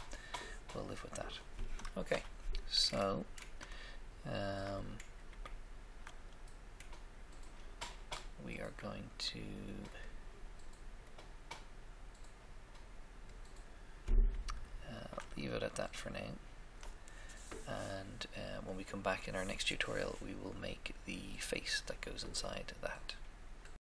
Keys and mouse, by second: 2.0 1, 2.1 KP_1, 10.0-12.8 drag, 14.8 shift+middle click, 15.6 middle click, 16.3 middle click.